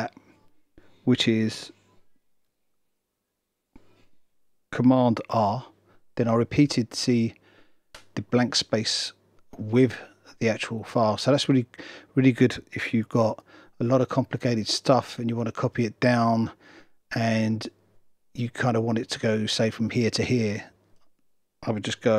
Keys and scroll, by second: 3.1 super+r, 13.2 super+z.